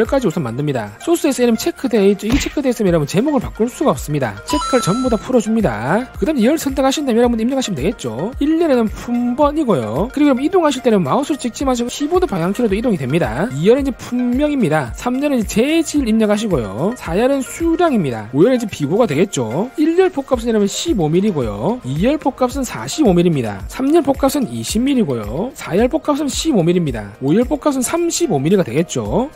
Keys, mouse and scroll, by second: 0.5 click, 4.4 click, 4.9 click, 5.6 click, 6.0 click, 7.5 click, 8.9-10.5 typing, 13.9-19.2 typing, 21.1 1, 21.4 5, 22.8-24.5 typing, 26.3-28.6 typing.